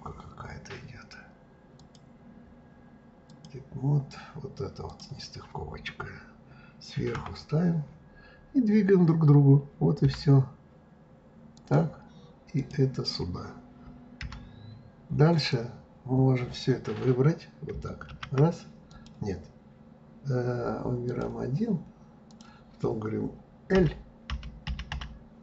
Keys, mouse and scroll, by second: 1.8-5.0 drag, 7.2 KP_7, 10.0 g, 12.6 click, 14.2 g, 15.9-16.7 scroll down 8, 18.1 shift+a, 18.9-21.2 drag, 22.3-23.7 drag, 23.7 l, 24.3 l.